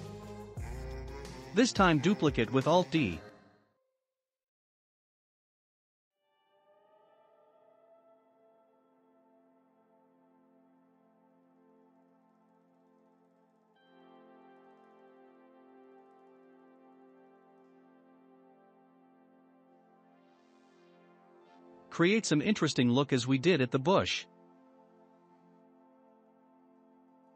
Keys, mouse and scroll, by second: 0.6 alt+d, 2.5 click, 3.8 s, 5.3-7.5 shift+middle drag, 7.5 click, 9.1-9.6 scroll down 2, 9.6-11.2 shift+middle drag, 11.2 click, 12.0 scroll down 2, 12.7 click, 13.7-15.7 shift+middle drag, 15.7 scroll up 4, 16.3-17.0 middle drag, 17.0-17.4 scroll up 2, 17.4-17.8 shift+middle drag, 17.8 click, 18.1-18.5 middle drag, 18.5 Tab, 18.8-19.4 scroll up 1, 19.4 scroll up 1, 19.4 2, 19.9 click, 20.5-21.7 scroll up 2, 21.7-23.9 middle drag.